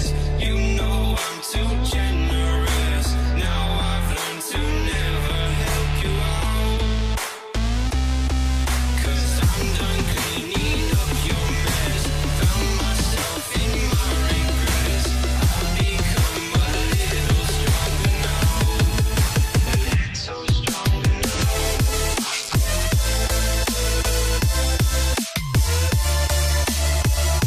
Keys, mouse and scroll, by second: 1.5 ctrl+shift+click, 8.7 ctrl+ظ, 9.7 Return, 10.2 Up, 10.6 Left, 10.8 Left, 11.1 Left, 11.5 Up, 12.0 Up, 12.9 ctrl+ف, 14.1 ctrl+shift+click, 17.4 shift+Return.